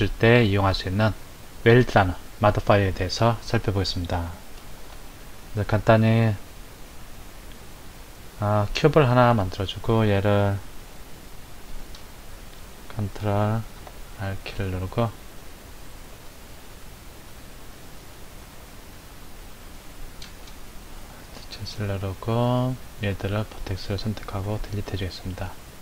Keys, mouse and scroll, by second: 4.2 click, 4.9 shift+a, 9.4-10.7 scroll down 2, 10.9 Tab, 13.7 ctrl+r, 18.5 click, 21.1 alt+z, 22.5 click, 24.4 Delete.